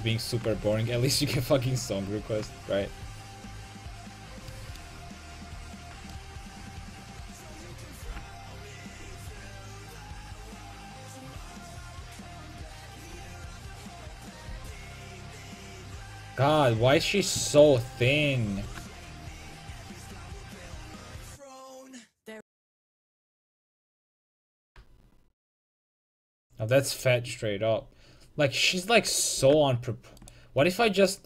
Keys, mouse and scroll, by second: 4.2 a, 4.6-6.2 drag, 7.4 right click, 8.1 g, 13.0 a, 14.6 c, 18.0-21.8 middle drag, 18.6 s, 27.1-29.4 right drag, 29.4 middle click, 29.4 s, 30.4 right click.